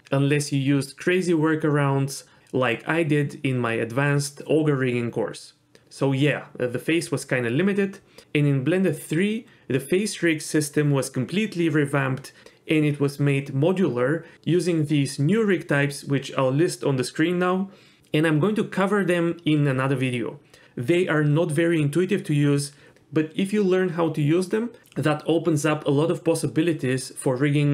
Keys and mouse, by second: 1.0 click, 1.8 h, 2.2 ctrl+z, 2.4 n, 3.3 click, 5.3 typing.